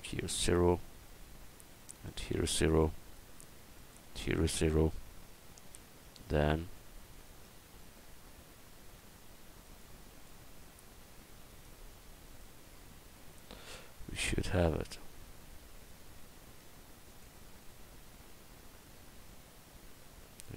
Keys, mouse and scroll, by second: 5.8 Tab, 6.3 Tab, 6.7 Tab, 7.4 Tab, 18.3 Tab.